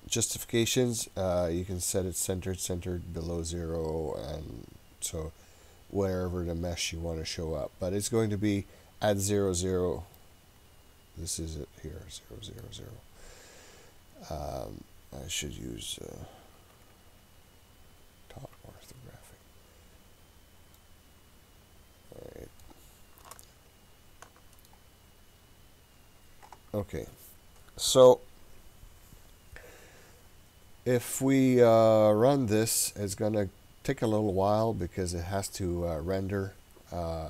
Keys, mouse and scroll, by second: 10.2-12.7 middle drag, 16.7 KP_7, 20.8-22.7 middle drag, 23.3-24.7 shift+middle drag.